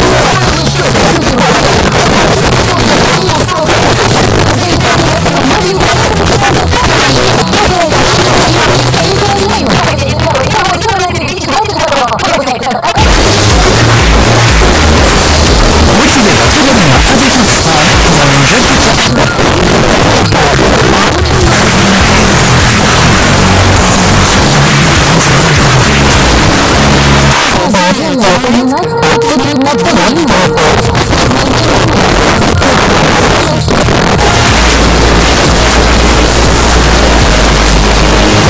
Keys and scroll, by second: 18.9 Page_Down, 27.4 Page_Down.